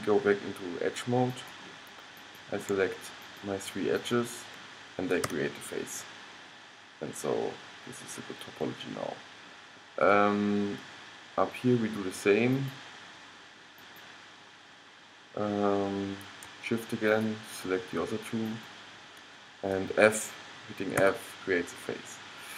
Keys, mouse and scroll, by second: 1.4-6.0 middle drag, 5.4 f, 6.2-8.6 middle drag, 10.3 middle click, 10.6-12.7 middle drag, 12.7-15.9 drag, 17.2-21.1 drag, 21.1 f, 22.4 middle click.